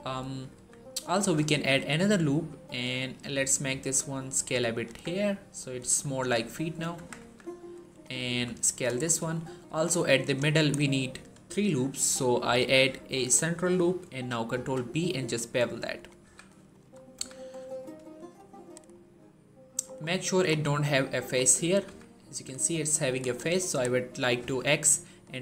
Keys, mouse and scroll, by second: 0.0-0.4 typing, 1.3 ctrl+r, 1.3 click, 3.6 s, 4.5 click, 4.7 Tab, 5.1-5.8 scroll down 1, 6.0 shift+middle click, 6.3-6.8 scroll up 1, 6.8 Tab, 7.0 z, 7.7 click, 8.1 s, 8.6 click, 8.9 shift+middle click, 9.5 ctrl+r, 10.1 click, 10.6 right click, 14.4 ctrl+b, 15.8 click, 16.1 z, 16.6 shift+middle click, 17.0 z, 18.2-19.7 click, 18.8 middle click, 19.9 scroll up 1, 20.1 middle click, 21.2-21.7 scroll up 2, 21.3 middle click, 21.7 z, 23.1 click, 24.3 x, 25.2 click.